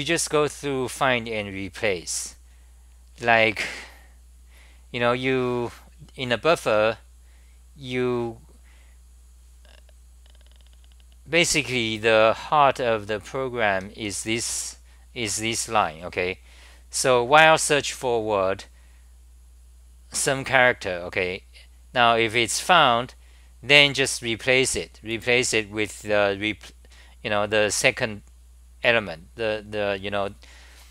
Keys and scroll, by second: 6.7 t, 10.8-14.6 typing.